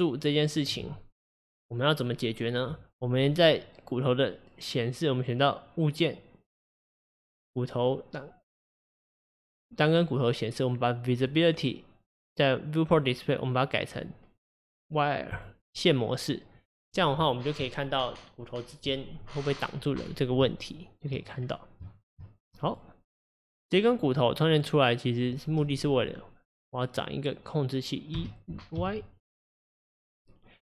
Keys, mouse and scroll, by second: 7.1 click, 9.7 click, 11.2-17.1 drag, 19.9-21.3 scroll up 6, 21.3-21.9 scroll down 1, 21.9 shift+middle click, 22.7 click, 23.4 click, 24.1 click, 24.5 click, 26.0 click, 26.5 click, 28.2 e.